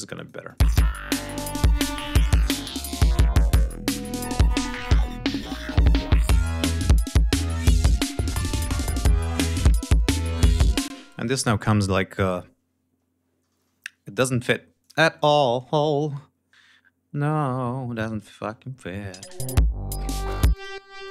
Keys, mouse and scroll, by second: 0.0 click, 0.5 space, 8.1 ctrl+scroll down 2, 9.7-10.2 scroll up 2, 10.7 space, 11.3 scroll down 2, 12.0-12.3 scroll down 2, 14.6 click, 15.0 scroll up 2, 16.0 ctrl+scroll up 2, 16.4 ctrl+scroll down 2, 17.6 ctrl+scroll down 2, 17.9 ctrl+scroll up 2, 19.0 space, 19.9 click, 20.4 click, 20.9 click.